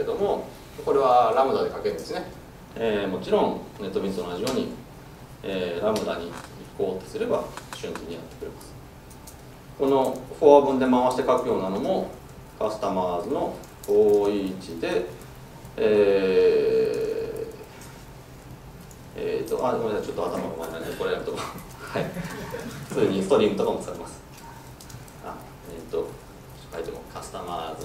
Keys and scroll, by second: 4.5 alt+Return, 12.9 Tab, 27.0 Tab.